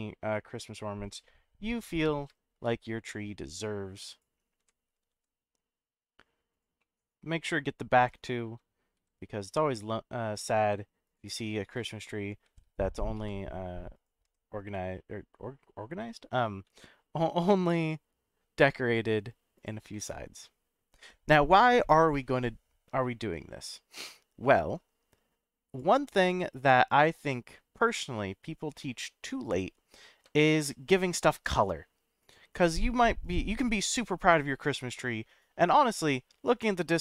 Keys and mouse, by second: 2.5 z, 4.1 click, 4.6 g, 5.1 shift+z, 6.5 click, 6.9 middle click, 9.0 shift+d, 11.0 click, 12.4 shift+d, 13.1 z, 13.9 click, 14.2 g, 16.6 shift+z, 19.5 click, 19.9-21.0 middle drag, 22.1-24.1 middle drag, 25.7 click, 26.2-27.6 middle drag, 27.9-28.7 middle drag, 29.5 click, 30.6 shift+d, 32.2 click, 32.5-33.1 middle drag, 33.2 click.